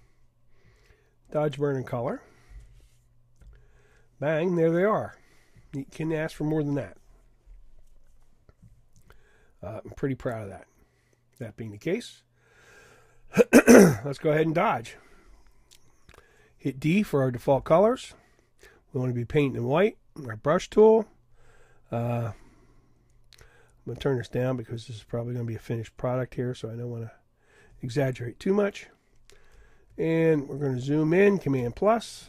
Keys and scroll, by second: 17.5 d, 29.9 super+=.